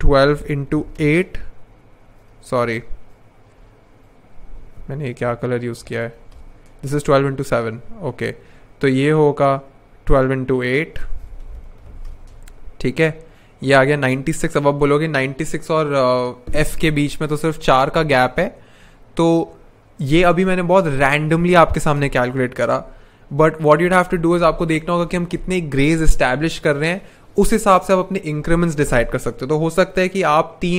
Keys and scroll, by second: 0.0-1.0 typing, 1.0 Return, 2.3 super+z, 5.0 Tab, 5.6-6.7 typing, 7.3 super+z, 10.7-12.3 typing.